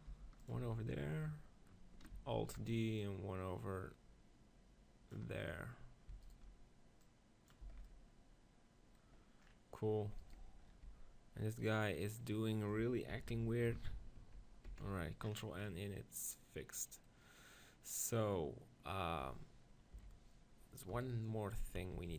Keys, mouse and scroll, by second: 0.1 g, 0.6 z, 2.4 alt+d, 3.0-4.8 drag, 6.2-7.5 drag, 7.0 right click, 7.6 shift+z, 8.2 click, 8.9-10.3 middle drag, 10.3 right click, 10.9 Tab, 11.1 click, 11.5 right click, 12.2-13.9 drag, 13.1 ctrl+l, 14.4 ctrl+n, 14.7 Tab, 15.6 middle click, 17.6-19.5 middle drag, 20.0 KP_7, 20.9 KP_1, 21.9 b.